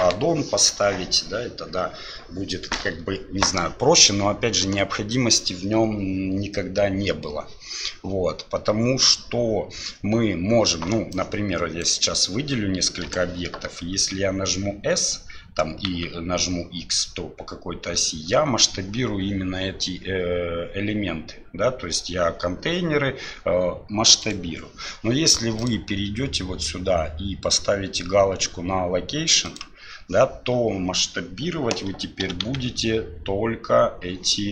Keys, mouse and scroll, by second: 11.3-11.8 drag, 13.9 s, 25.7-30.1 drag, 32.2 s.